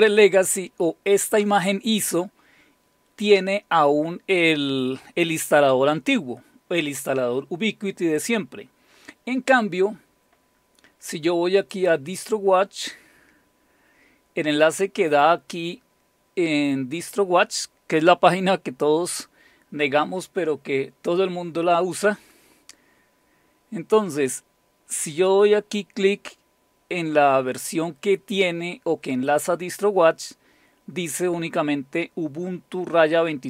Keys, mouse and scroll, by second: 11.6 click, 13.7-14.8 scroll down 2, 15.7-16.5 scroll up 2.